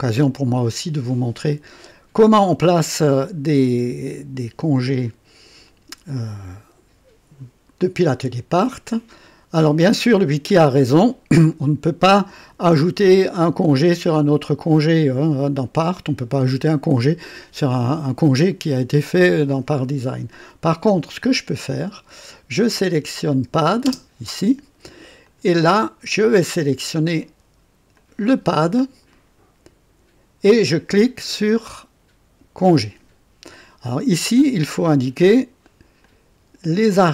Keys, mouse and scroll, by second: 22.8 click, 23.8 space, 25.2 click, 27.9 click, 32.5 click, 35.9 click.